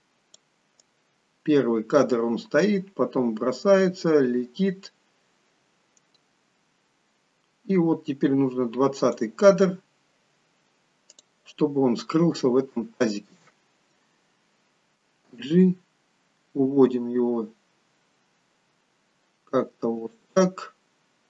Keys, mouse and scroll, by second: 0.9 click, 9.8-10.6 scroll up 2, 11.2 click, 11.2 scroll up 1, 12.6 shift+middle click, 15.4 g, 20.7-21.2 scroll up 1.